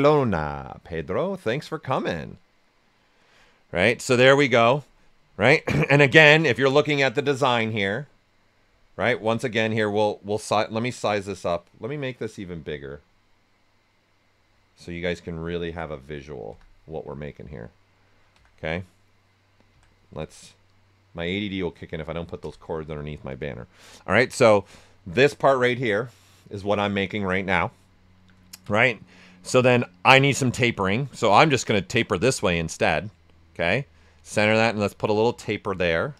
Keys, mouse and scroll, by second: 5.5 alt+right click, 9.0 z, 10.5-16.5 drag, 16.5 z, 17.2 alt+right click, 18.3 z, 20.1 typing, 20.6 click, 22.4 z, 23.1 alt+right click, 28.0 alt+right click, 28.4 ctrl+right click, 28.7 typing, 31.2 ctrl+click, 32.1 right click, 32.4 w, 33.7 click.